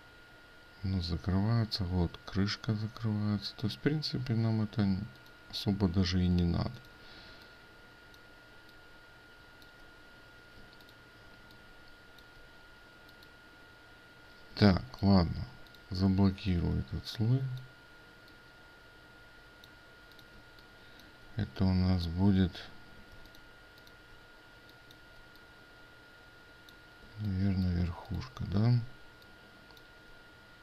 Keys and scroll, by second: 10.7 ctrl+space, 16.6 ctrl+2.